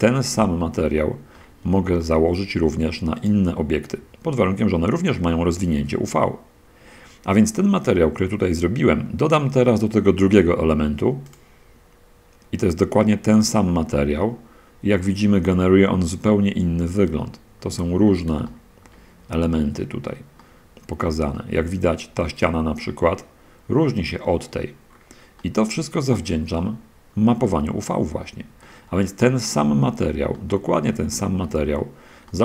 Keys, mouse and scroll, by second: 0.2-0.8 drag, 1.0 drag, 1.6 click, 2.4-3.0 shift+drag, 3.4 shift+right click, 13.8 click, 15.4-17.7 middle drag, 17.7-18.4 scroll up 1, 18.8 shift+middle click, 18.9-19.3 shift+scroll down 1, 19.8 middle click, 20.1-21.4 drag, 21.6 click, 22.7 middle click, 24.3 right drag, 25.7-27.6 middle drag, 27.8 middle click, 28.0 click, 28.9-30.6 drag, 30.8-31.9 shift+drag, 32.1 shift+middle click.